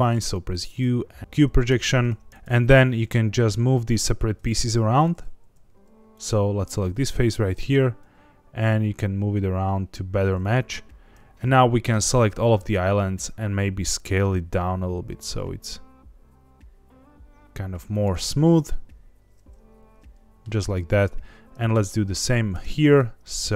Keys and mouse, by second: 1.7 Tab, 2.3 Tab, 2.4 3, 2.9 g, 4.0 Escape, 5.8 3, 6.1 click, 7.3 a, 7.6 g, 10.4 click, 11.1 Escape, 11.1 a, 11.1 s, 11.9 a, 12.6 s, 17.9 click, 18.2 Tab, 18.6-20.4 middle drag, 22.5 Tab, 22.8-23.5 right drag.